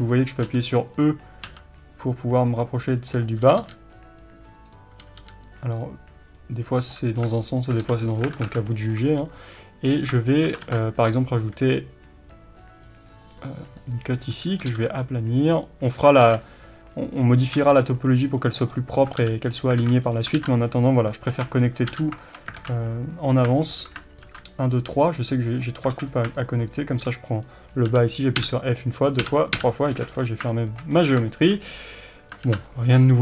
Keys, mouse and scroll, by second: 3.5 g, 4.7 click, 5.1 g, 7.2 click, 7.9 f, 8.1 scroll down 1, 8.4 alt+a, 8.7-14.4 shift+middle drag, 10.0 scroll down 1, 10.7 ctrl+r, 14.4 click, 14.6 s, 15.5 click, 16.2 ctrl+r, 17.5 click, 19.2 f, 19.8 alt+a, 20.1 scroll up 1, 20.4 ctrl+r, 21.4 click, 22.0 f, 22.2-25.6 shift+middle drag, 22.6 alt+a, 23.3 scroll up 1, 24.2 ctrl+r, 25.6 click, 26.0 alt+a, 26.2 click, 27.9 f, 30.0 alt+a, 30.2-30.5 scroll down 1, 30.5-33.2 shift+middle drag, 30.9-31.3 scroll up 1, 31.8-32.5 scroll up 1, 32.5 ctrl+r.